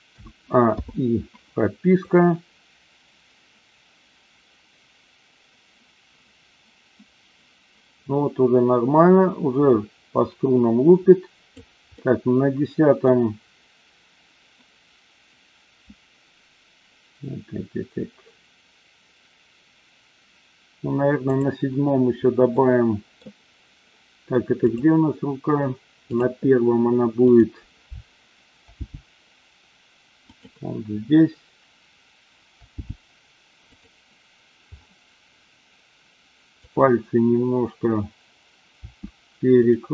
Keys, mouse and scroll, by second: 0.1 a, 0.8 i, 2.1-11.5 drag, 11.9-13.1 middle drag, 21.2 click, 22.6 middle click, 24.6 click, 26.1 click, 27.3 click, 28.7 g, 30.4 click, 32.7 g, 33.7 click, 36.5-37.2 drag, 38.7 r, 39.5 click.